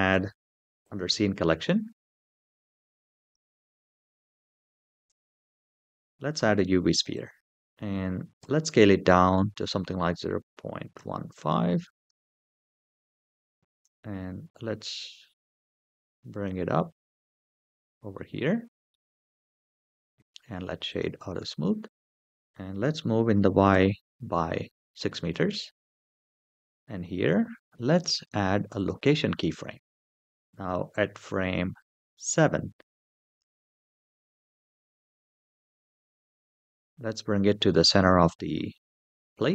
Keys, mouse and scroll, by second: 0.6 click, 1.7 click, 3.0 click, 4.8 shift+a, 8.2 s, 10.7 KP_Decimal, 11.1 KP_1, 11.3 KP_5, 11.8 KP_Enter, 12.7 middle click, 13.2 KP_1, 13.3 g, 13.6 z, 16.1 click, 16.8-17.9 scroll up 4, 17.9-18.7 middle drag, 19.7 right click, 21.3 scroll down 2, 22.2 shift+middle click, 22.2-22.6 scroll down 1, 23.2 g, 23.5 y, 24.5 KP_6, 24.8 KP_Enter, 25.8 shift+middle drag, 27.7 i, 30.3-32.2 drag, 33.2 g, 33.4 y, 35.2 KP_Subtract, 35.5 KP_6, 35.8 KP_Enter, 37.5-38.5 middle drag.